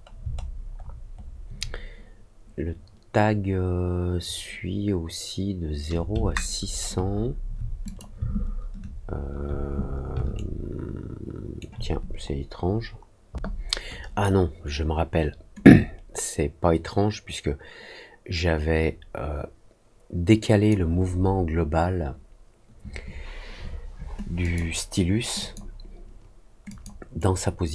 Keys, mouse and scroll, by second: 0.4 alt+middle click, 0.7 alt+middle click, 1.1 alt+middle click, 6.2 ctrl+alt+middle click, 6.6 ctrl+alt+middle click, 7.1 alt+middle click, 7.8 click, 8.3 ctrl+alt+middle click, 8.9 alt+middle click, 10.3-11.5 alt+right drag, 15.6-20.6 drag, 24.4 click, 25.3 click, 26.6 click, 27.1-27.7 right drag.